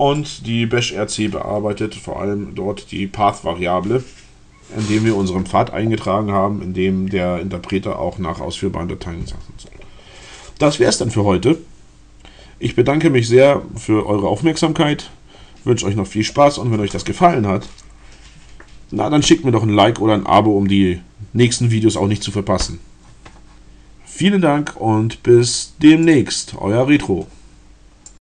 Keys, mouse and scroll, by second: 26.1 middle click.